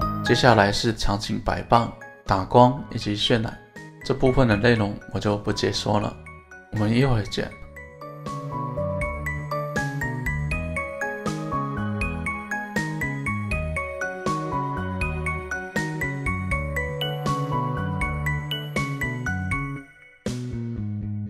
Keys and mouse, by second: 4.2 ctrl+a, 5.4 ctrl+a, 5.5 click, 6.1 click, 6.9 middle click, 8.3 ctrl+p, 9.3 middle click, 9.4 click, 9.5 middle click, 10.0 right click, 10.0 g, 10.7 shift+F2, 11.0 r, 11.3 click, 11.4 middle click, 12.2 middle click, 12.5 right click, 12.5 g, 12.6 middle click, 12.9 middle click, 13.2 middle click, 13.5 click, 13.7 Tab, 13.9 middle click, 14.1 2, 14.6 KP_1, 14.8 middle click, 15.1 alt+z, 15.3 click, 16.0 shift+s, 17.5 Tab, 17.8-18.9 right drag, 18.9 click, 19.0 middle click, 19.9 shift+s, 20.7 middle click.